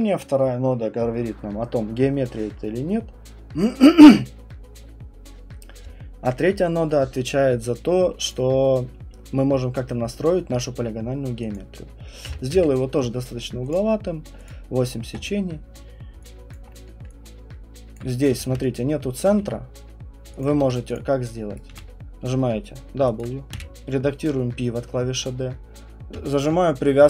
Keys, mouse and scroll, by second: 8.3 click, 11.5 click, 12.2 8, 12.5 Return, 13.7 click, 13.9 middle click, 14.5 click, 14.5 middle click, 17.9 alt+click, 18.3 d, 19.2 alt+click, 19.3 q, 20.4 alt+click, 20.6 d, 20.9 click, 21.5 right click, 21.7 w, 23.2 alt+click, 23.5 d, 26.1-27.0 typing.